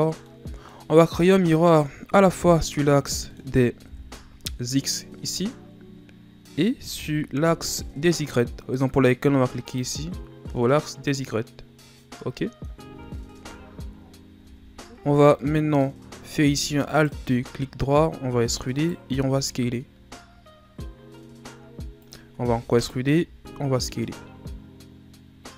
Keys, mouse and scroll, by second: 0.0 scroll down 4, 0.3-2.2 middle drag, 2.2-3.3 scroll up 2, 3.3 scroll up 2, 3.3 middle click, 3.9 KP_1, 9.7 click, 10.5-13.4 middle drag, 13.4 KP_7, 14.4 Tab, 15.4 middle click, 16.1-16.9 scroll up 1, 16.9 alt+right click, 18.2 e, 22.7 e.